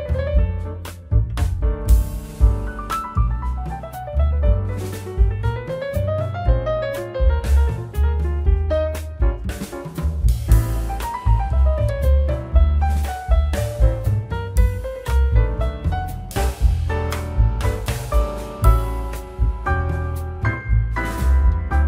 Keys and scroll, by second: 2.5 a, 3.2 Return, 4.2 k, 5.7 Return, 7.6 k, 8.5 a, 9.2 Return, 10.8 shift+z, 12.4 ctrl+z, 13.1 w, 13.4 w, 16.0 x, 20.9 z.